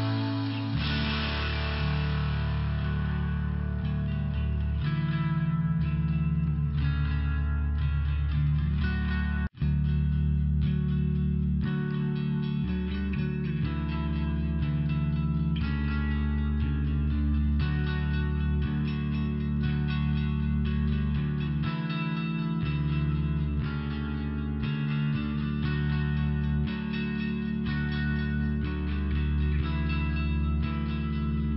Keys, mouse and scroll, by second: 0.3 click, 0.4 click, 0.9 click, 1.0 click, 1.3 click, 1.4 click, 1.8 click, 1.9 double click, 2.4 double click, 2.5 double click, 2.7 double click, 2.8 double click, 3.1 double click, 3.1 double click, 3.5 double click, 3.6 double click, 3.8 click, 3.9 click, 4.3 click, 4.4 double click, 4.7 double click, 4.9 double click, 5.2 double click, 5.3 double click, 5.6 double click, 5.6 double click, 5.9 double click, 6.0 double click, 6.4 double click, 6.5 double click, 7.2 click, 7.3 click, 7.6 click, 7.7 click, 8.8 click, 8.9 click, 10.3 click, 10.4 click, 11.4 click, 11.5 click, 11.8 click, 11.9 click, 12.3 click, 13.3 double click, 14.5 click, 14.6 click, 14.9 click, 15.0 double click, 15.3 double click, 15.5 double click, 15.8 double click, 16.0 double click, 16.3 click, 16.4 click, 16.6 click, 16.7 double click, 17.0 double click, 17.1 double click, 17.4 double click, 17.5 double click, 17.7 double click, 17.8 double click, 18.0 double click, 18.1 double click, 18.4 double click, 19.0 click, 19.1 click, 19.4 click, 19.5 double click, 19.7 double click, 19.8 double click, 20.6 click, 23.0 click, 27.9 click.